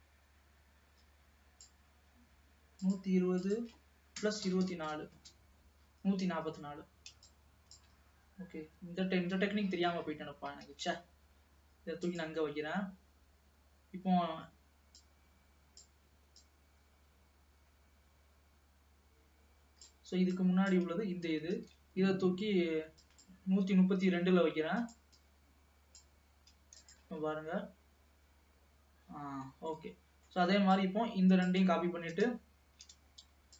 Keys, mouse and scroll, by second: 3.0-6.0 drag, 7.4-10.4 drag, 10.8 shift+d, 15.1-19.6 drag, 20.5-21.6 drag, 21.6 shift+d, 24.2 g, 25.2-27.1 drag, 27.1 space, 29.1 space, 29.7 scroll down 1, 29.8-30.8 middle drag, 30.8-33.5 drag.